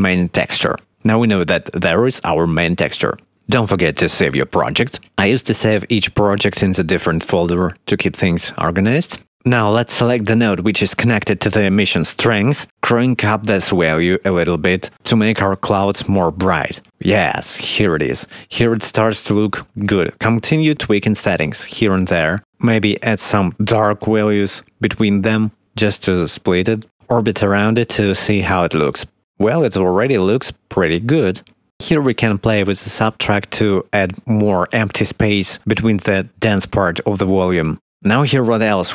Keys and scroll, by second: 0.0-1.3 typing, 4.1-6.5 typing, 7.9 ctrl+c, 8.7 ctrl+v, 28.5 0, 31.9 x.